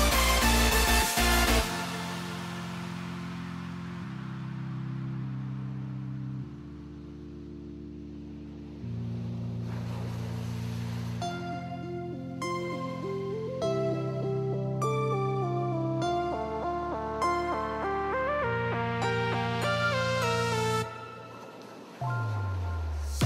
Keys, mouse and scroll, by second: 4.2 shift+middle drag, 4.7 shift+middle click, 6.2 shift+middle click, 7.2 Tab, 9.7 shift+middle click, 11.8-16.1 drag, 17.3 click.